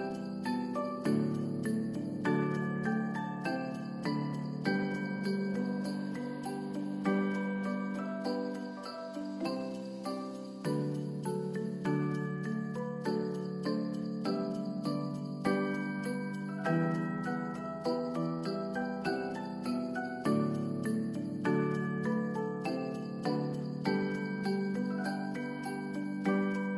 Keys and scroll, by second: 1.8 s, 5.4 space, 8.6 space, 10.1 s, 13.0 space, 18.6 space, 19.8 ctrl+s, 21.4 space.